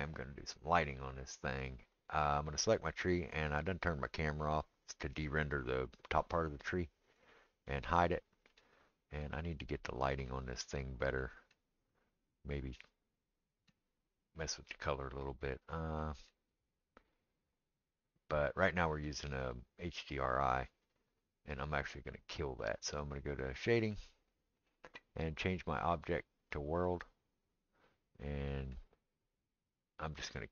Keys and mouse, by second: 2.0 click, 2.1-3.6 middle drag, 3.6 click, 3.8 middle click, 4.1 click, 4.3-7.0 middle drag, 7.0 click, 7.2-26.0 middle drag, 23.9 click, 26.0-30.5 drag.